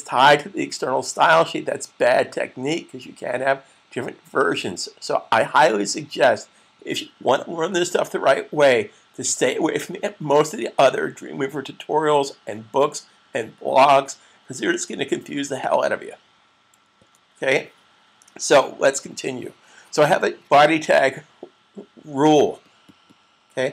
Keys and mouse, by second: 15.5 click, 16.8 super+s, 23.6 click.